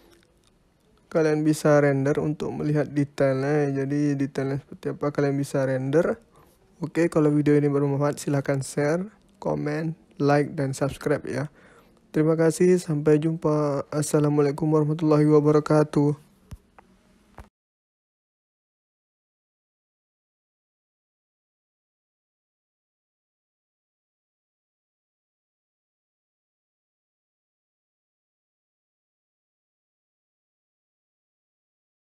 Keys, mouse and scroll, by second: 0.8 middle click, 3.1-3.5 scroll down 5, 3.5 middle click, 4.3 scroll up 1, 4.5 middle click, 10.5 click, 13.9 scroll up 1, 14.9 click, 15.5 middle click, 17.5 scroll up 3, 18.4 scroll down 4, 19.0 middle click, 19.8 middle click, 24.9 middle click, 27.3 click, 29.6 click.